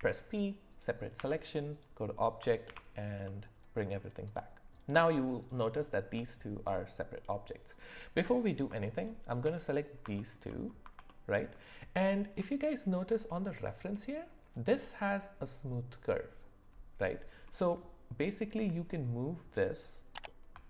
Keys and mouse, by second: 0.0 p, 1.2 Tab, 2.7 alt+h, 3.2-4.0 middle drag, 4.2 click, 5.4 shift+click, 7.7 click, 8.4 click, 11.1 shift+middle click, 19.7 click.